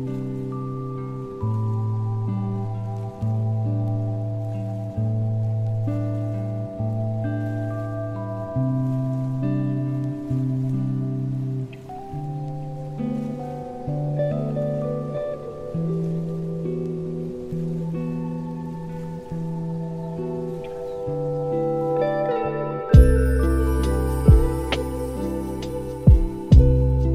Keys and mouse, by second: 0.8 click, 3.0-4.0 middle drag, 4.4 shift+middle drag, 4.7 middle drag, 5.3 shift+middle click, 5.9 shift+middle drag, 6.9 shift+click, 7.7 shift+a, 10.2-14.8 drag, 11.3 KP_0, 16.0 click, 17.8 middle drag, 18.2 shift+middle click, 18.5 shift+d, 20.8 shift+middle drag, 21.3 shift+d, 23.5 g, 25.3 shift+d.